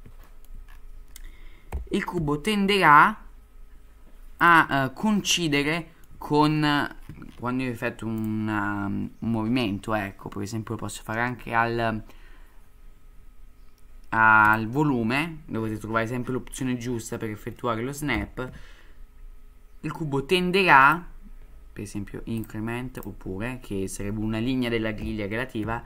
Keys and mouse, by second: 0.3 shift+middle drag, 1.7 g, 5.7-6.0 shift+middle drag, 8.3-14.8 drag, 18.1 g, 22.5-23.3 drag, 25.0 g.